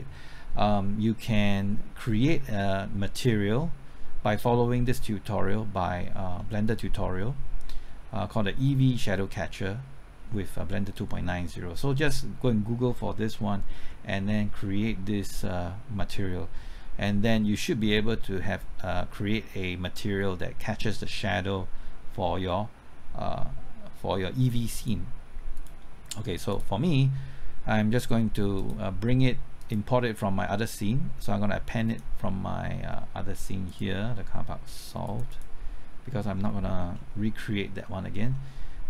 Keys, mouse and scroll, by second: 6.3 scroll up 1, 6.4 scroll down 1, 7.8 scroll up 1, 24.8 click, 36.3-37.6 scroll down 1.